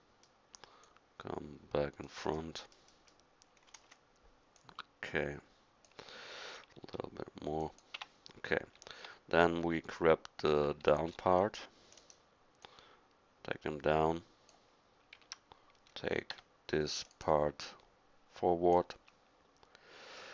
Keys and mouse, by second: 0.8-2.5 drag, 2.6-3.5 middle drag, 3.9 KP_1, 6.9 s, 8.0 Tab, 10.5 a, 11.1 c, 15.2 a, 16.3 c.